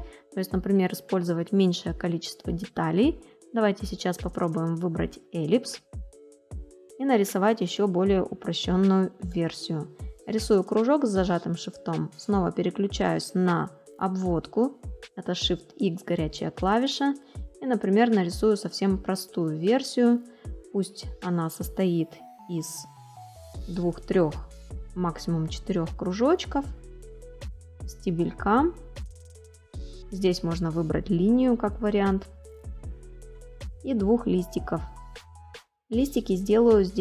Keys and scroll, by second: 0.0 space.